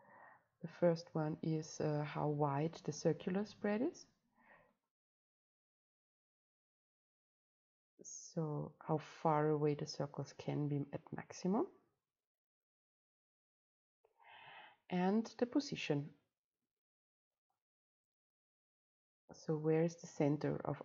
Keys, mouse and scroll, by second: 5.5-7.0 middle drag, 7.2 click, 8.1-16.7 right drag, 16.7-18.3 drag, 18.3 middle click, 20.3-20.8 right drag.